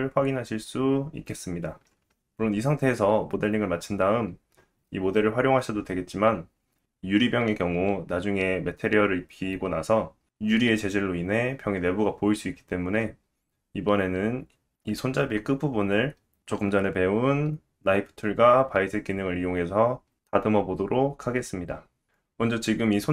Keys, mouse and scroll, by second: 22.2-23.1 drag, 22.2 right click.